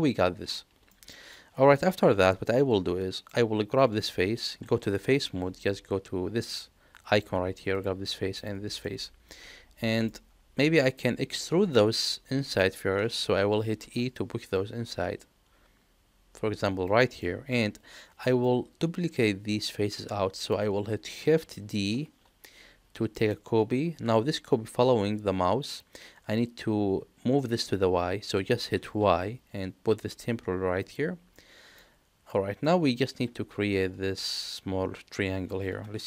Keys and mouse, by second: 0.8 shift+middle click, 1.3 middle click, 3.1 click, 7.2 click, 8.4 shift+click, 8.8-10.1 middle drag, 10.7-13.1 middle drag, 13.8 e, 17.1 middle click, 18.4-20.5 middle drag, 21.9 shift+d, 31.3 middle click, 32.2 middle click.